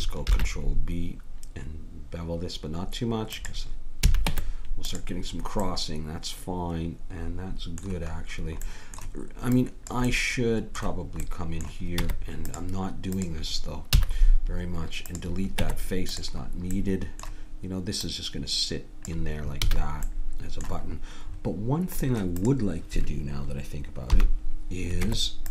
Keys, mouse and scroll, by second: 0.2 ctrl+b, 4.0 a, 4.2 Tab, 5.4 middle click, 6.2-9.6 middle drag, 9.5-11.3 drag, 11.3-12.3 middle drag, 12.0 Tab, 13.1 click, 13.9 x, 15.6 Tab, 18.0-20.1 drag, 19.6 a, 22.4-24.0 drag, 24.1 KP_1, 25.0 Tab.